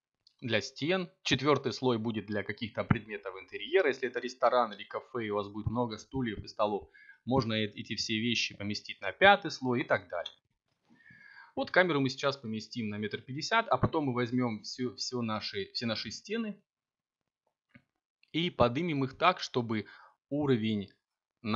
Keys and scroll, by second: 7.7 b.